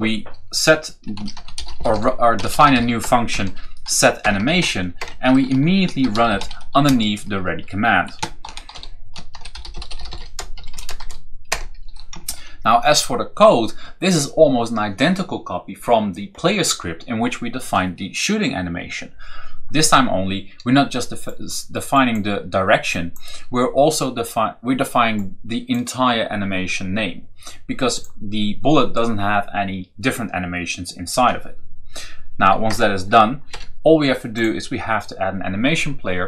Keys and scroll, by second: 0.9-4.4 typing, 4.1 Return, 4.8 Return, 5.6-6.7 typing, 8.0-10.9 typing, 11.3 shift+Return, 12.1 ctrl+v, 32.5 Return, 33.4 BackSpace.